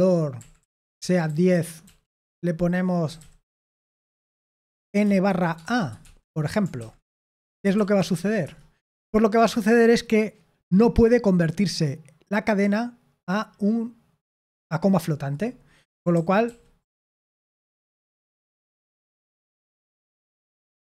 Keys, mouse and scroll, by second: 0.3-4.7 typing.